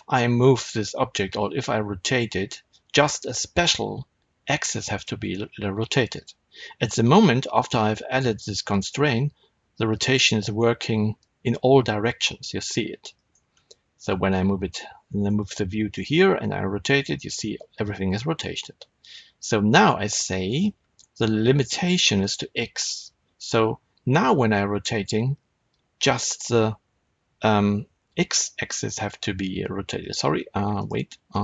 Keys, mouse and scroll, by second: 8.9 r, 13.2 right click, 13.9-18.5 middle drag, 16.1 r, 18.5 right click, 22.1 click, 24.6 r, 30.0 right click, 30.6 click, 31.2 click.